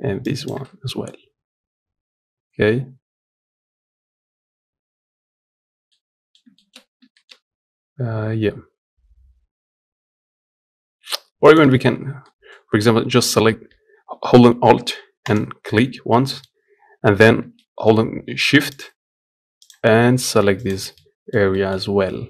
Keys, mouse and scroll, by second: 0.2 ctrl+click, 0.6-1.6 scroll down 1, 1.6-5.3 scroll up 1, 5.3 scroll up 1, 5.3-5.6 scroll down 1, 5.6 middle click, 6.6-6.9 scroll up 2, 6.9-11.3 shift+middle drag, 11.3 click, 12.0-15.1 middle drag, 15.1 alt+click, 15.5-15.9 scroll down 1, 15.9-18.6 middle drag, 18.6 shift+click, 19.4 shift+click, 20.7 middle click, 21.6-22.1 scroll up 1, 22.1-22.2 middle drag.